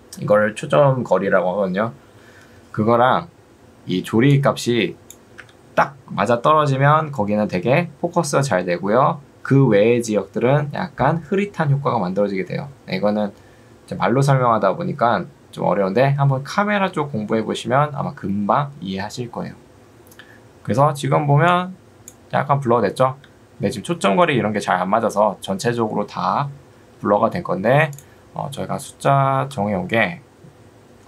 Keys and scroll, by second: 5.5 Escape, 23.3 Escape, 28.7 2, 30.1 Tab.